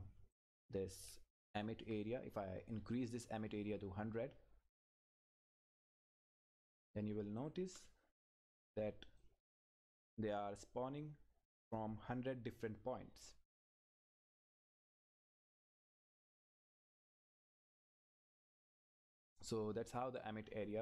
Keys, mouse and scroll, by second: 0.3 click, 1.1 Left, 3.6-4.8 scroll up 1, 4.8 click, 8.2 Return, 9.2 click, 9.6-10.1 scroll down 1, 14.3 click, 14.6 Left.